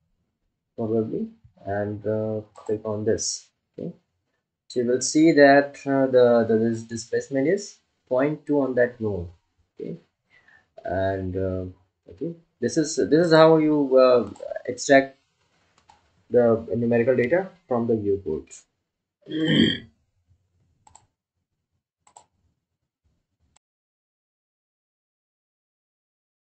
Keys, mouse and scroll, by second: 16.4 click.